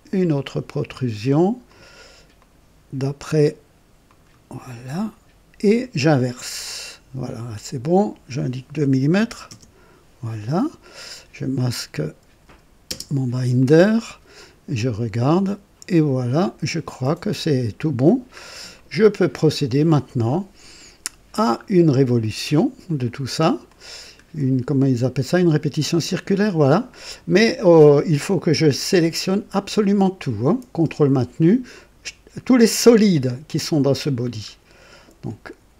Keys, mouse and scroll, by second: 1.6 click, 2.3 click, 4.0 click, 6.3 click, 7.9 click, 9.1 KP_2, 9.4 KP_Enter, 10.4-11.1 drag, 10.6 typing, 11.5 click, 12.8 typing, 13.5-17.2 drag, 18.0-18.4 scroll down 2, 18.7-19.5 right drag, 19.6-22.3 drag, 22.8-24.3 drag, 29.2 click, 31.7 ctrl+click, 33.1 ctrl+click, 33.9 ctrl+click, 34.5-34.8 ctrl+scroll down 2.